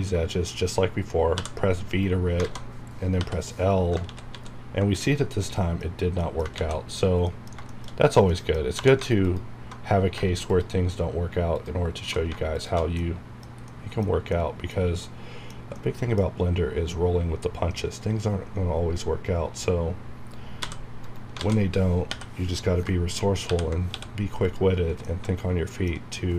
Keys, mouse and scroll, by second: 1.3 v, 1.9 right click, 3.2 l, 4.0 ctrl+z, 5.0 middle click, 5.9 scroll up 1, 6.2 middle click, 6.2 middle click, 6.5 ctrl+z, 7.2 middle click, 7.4 scroll down 1, 7.7 shift+middle click, 7.9 scroll up 1, 8.3 middle click, 8.7 2, 9.2 alt+click, 9.9 scroll down 1, 10.5 alt+shift+click, 12.5 alt+shift+click, 16.4 scroll up 1, 20.6 v, 21.0 right click, 22.1 l, 22.5 scroll down 1, 23.9 x, 24.4 click, 25.0 middle click, 26.1 scroll down 1.